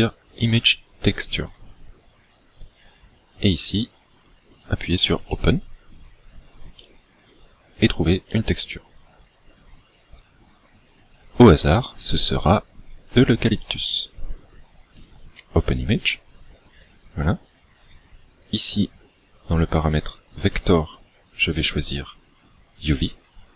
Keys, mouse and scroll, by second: 4.7 click, 15.1 click, 21.6 click.